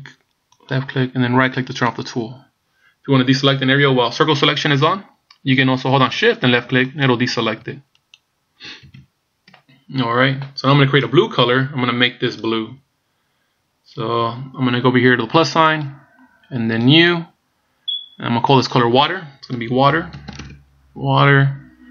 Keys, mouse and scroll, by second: 2.0 right click, 4.8 c, 8.2 right click, 9.0 ctrl+z, 15.8 click, 17.0 click, 18.6 click.